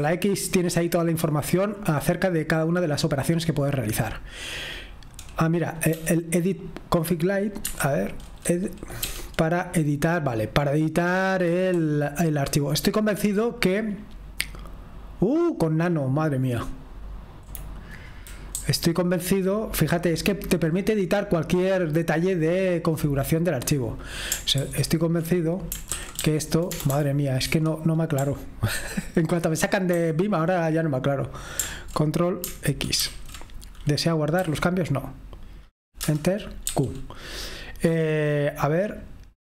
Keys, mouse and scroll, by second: 0.0 x, 6.0 e, 7.7 Escape, 9.0 e, 11.7-14.6 Down, 14.8 typing, 15.1-17.4 Down, 18.6-19.5 Down, 19.7 typing, 19.8-23.2 Down, 24.6 ctrl+u, 25.9-26.8 typing, 27.5 Escape, 30.0 ctrl+z.